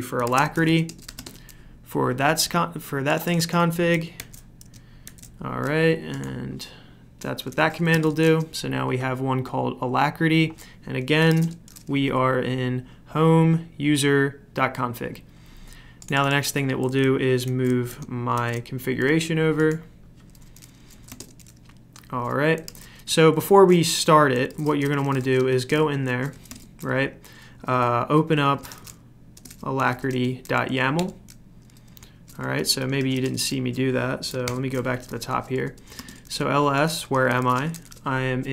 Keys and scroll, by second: 0.0-1.6 typing, 4.2 ctrl+c, 5.0 ctrl+v, 7.6-8.4 typing, 10.5-11.8 typing, 17.4 ctrl+c, 18.3 ctrl+v, 20.8-26.8 typing, 28.2-34.4 typing, 34.4 ctrl+l, 35.6-38.0 typing.